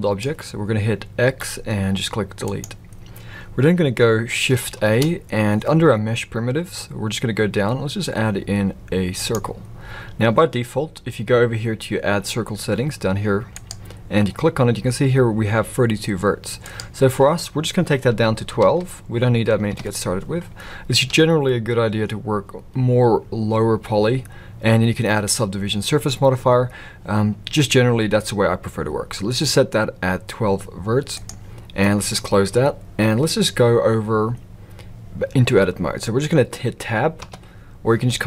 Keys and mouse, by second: 1.2 x, 4.8 shift+a, 16.7-21.0 drag, 31.7 middle click, 37.2 Tab.